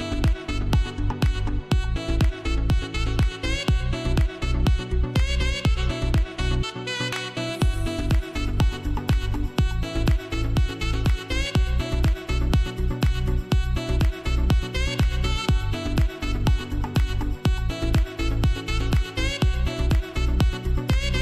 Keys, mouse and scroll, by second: 0.4 [, 0.7 click, 2.5-2.9 scroll down 1, 4.6 space, 4.8 click, 4.8 click, 5.1 space, 6.2 scroll up 1, 6.6-7.0 typing, 6.7 scroll up 1, 7.5-8.9 drag, 8.9 [, 9.9 click, 10.4 ], 10.6 click, 11.7 ], 12.2 click, 13.8 right click, 14.3 click, 14.3 click, 14.8-16.0 typing, 15.6 click, 17.2-18.8 typing, 17.6 click, 17.8 click, 18.9-21.0 drag.